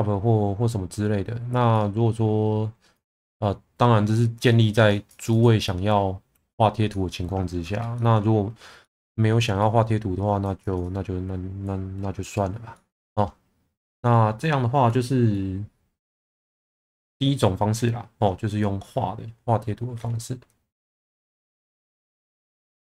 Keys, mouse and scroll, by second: 1.7-2.9 drag, 4.4 click, 5.0 click, 5.3 click, 6.3-7.5 middle drag, 7.9 shift+middle click, 8.8 middle click, 9.6 click, 10.6 click, 10.8 click, 12.7 middle click.